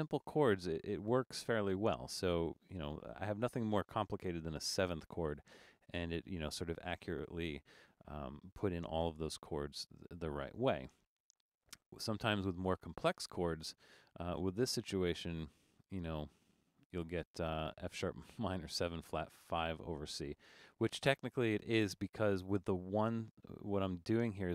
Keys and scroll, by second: 16.8 super+d.